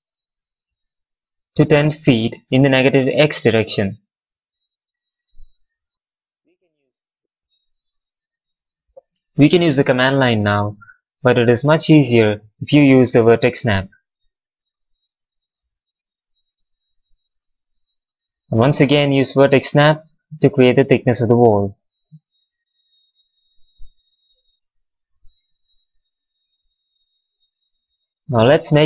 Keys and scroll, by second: 15.6 v, 20.1 w, 22.3 v, 24.1 space.